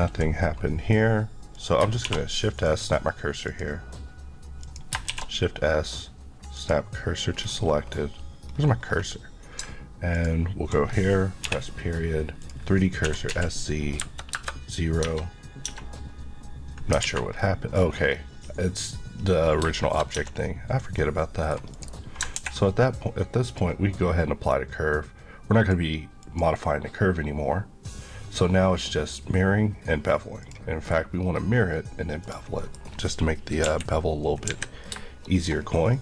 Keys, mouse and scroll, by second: 1.6 click, 2.0 shift+s, 2.6 click, 5.1 shift+s, 6.5 click, 7.4-7.9 scroll down 1, 8.5-9.6 scroll up 2, 9.6-10.1 ctrl+scroll up 1, 10.1 ctrl+click, 12.4 click, 13.0-14.0 typing, 14.3 Return, 15.0 Tab, 16.0-16.9 scroll up 1, 17.1 alt+a, 17.4 scroll down 1, 18.1-19.6 scroll down 1, 19.6-20.2 shift+scroll up 3, 19.8 shift+middle click, 21.0 middle click, 21.7 click, 23.5 click, 32.6 middle click, 32.9 scroll down 1, 33.6 KP_1, 34.5 KP_3, 35.2 shift+middle click, 35.6-35.9 shift+scroll up 1.